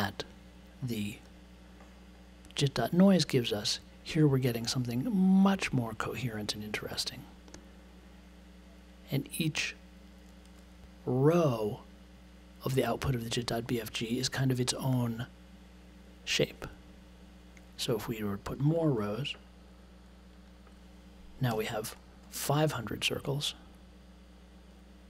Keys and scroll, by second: 21.5 5.